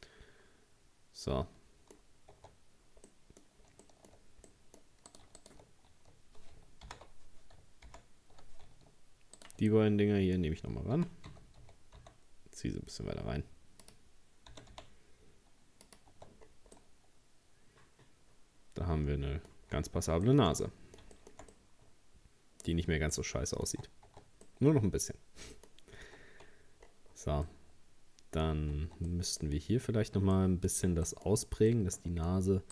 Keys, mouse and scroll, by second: 2.0-2.3 scroll up 1, 2.4 Tab, 3.1 scroll up 1, 3.1 middle click, 3.7-4.5 shift+scroll up 2, 3.9 shift+middle click, 4.5 middle click, 5.1 right click, 5.4 shift+right click, 6.9 ctrl+z, 7.9 ctrl+z, 9.4 shift+right click, 9.7-11.0 middle drag, 11.0 g, 14.5 g, 16.2 Tab, 16.4-16.8 scroll down 2, 16.8-19.7 middle drag, 19.7-20.3 scroll down 2, 20.3-22.7 shift+middle drag, 22.7-23.2 scroll up 3, 23.2 middle click, 24.1 Tab, 24.5-25.7 middle drag, 25.7-26.1 scroll up 1, 26.1 Tab, 26.8-27.5 scroll down 6, 27.5-28.5 middle drag, 28.5-28.8 scroll up 1, 28.8 Tab, 29.1 middle click, 29.4-30.4 scroll up 1, 30.4 middle click, 30.9 scroll up 1, 31.1 shift+middle click, 31.5 scroll up 1, 31.7-32.7 middle drag.